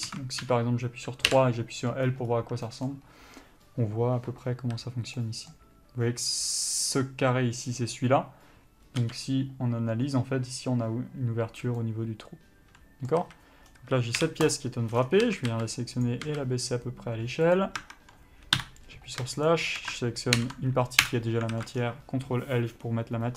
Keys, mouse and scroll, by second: 0.7 3, 1.5 l, 5.5 middle click, 6.9 click, 9.2 l, 11.8 scroll down 1, 12.0 middle click, 13.5 a, 13.9-14.4 scroll down 1, 14.8 u, 15.5 a, 15.8 s, 16.3 click, 16.5 s, 18.1 Tab, 18.8 KP_Divide, 19.8 shift+click, 21.4 Return, 21.8 alt+a, 22.0 scroll down 1.